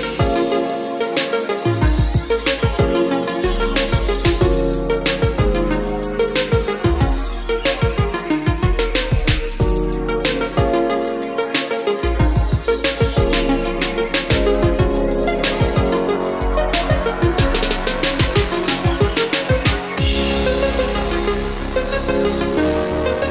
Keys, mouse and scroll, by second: 9.9 KP_4, 12.1 click, 12.6-13.2 scroll up 1, 14.3-14.7 scroll down 1, 15.0-19.9 drag, 21.1-23.3 scroll down 1.